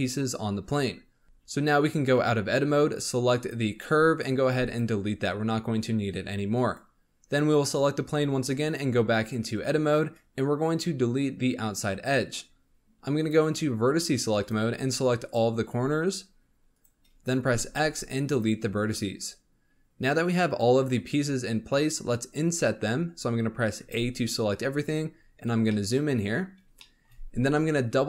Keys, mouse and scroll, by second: 1.2 Tab, 2.1 Tab, 3.3 click, 4.3 x, 6.6 click, 8.7 Tab, 13.1 click, 14.3 click, 15.2 shift+click, 16.0 shift+click, 16.7 shift+click, 17.6 x, 23.7 a, 24.7-25.2 scroll up 9, 25.6 shift+middle click, 26.1 scroll up 3, 26.7-28.0 shift+middle drag.